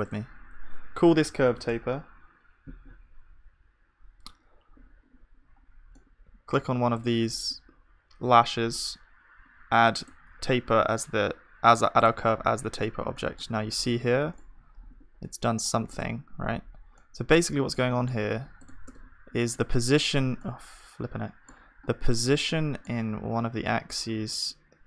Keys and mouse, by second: 5.6-8.5 middle drag, 8.5 right click, 12.6-14.8 middle drag, 14.8 KP_1, 16.9-17.9 drag, 16.9-17.9 middle drag, 18.9 Tab, 18.9-20.6 drag, 18.9-20.6 right drag, 18.9 `, 22.2-24.1 drag, 23.8 g.